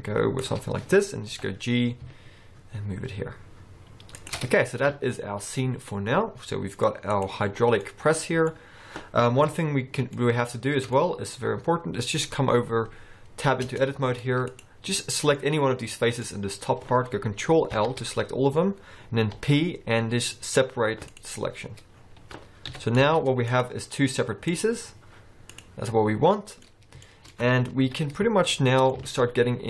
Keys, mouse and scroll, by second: 1.4 g, 4.6-5.9 scroll down 3, 5.0 alt+a, 5.9 scroll down 1, 6.0 middle click, 7.2 click, 7.9 middle click, 9.6 KP_1, 10.2 shift+middle click, 10.6-10.9 scroll up 3, 11.0 shift+middle click, 12.7-13.2 scroll down 1, 13.2-13.7 scroll down 1, 13.8 Tab, 14.1-14.6 scroll up 2, 14.6 click, 15.0 middle click, 15.5-16.0 scroll down 3, 16.0 middle click, 16.3 scroll up 1, 17.8 ctrl+l, 19.5 p, 22.0-22.7 scroll down 4, 22.8 KP_1, 23.1 Tab, 23.6 click, 24.0-24.6 scroll up 3, 24.6 click, 25.6 click, 26.0 middle click, 27.2 shift+middle click, 27.9 KP_1, 28.6 shift+middle click, 29.1 alt+a.